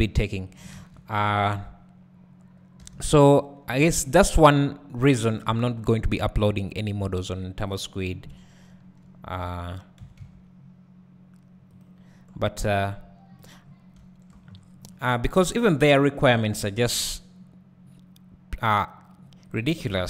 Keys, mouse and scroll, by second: 0.5 right click, 0.8 ctrl+z, 1.2-2.8 scroll up 1, 2.8 3, 3.3-3.8 scroll up 1, 3.8 alt+a, 4.4 click, 5.7 i, 7.7 click, 8.1 KP_Decimal, 8.8 scroll down 2, 9.0 `, 10.0 s, 12.6 click, 13.6-19.6 drag, 13.6-15.4 scroll down 4, 14.0 `, 15.4 `, 16.2 e, 19.9 KP_Decimal.